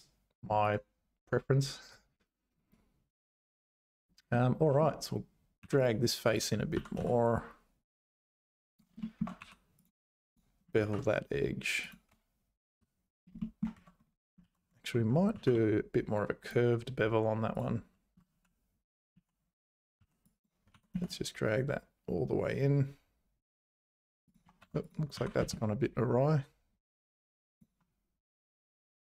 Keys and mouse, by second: 4.5 middle click, 5.6 3, 5.8 click, 6.3 click, 6.7 g, 9.0 shift+middle click, 9.4 2, 10.3 click, 10.8 ctrl+b, 12.1 `, 13.4 shift+click, 14.4 ctrl+z, 15.3 ctrl+b, 17.5 click, 18.3 ctrl+z, 19.1 ctrl+z, 20.0 1, 20.3 click, 20.7 g, 24.6 Tab, 25.1 g, 28.6 click.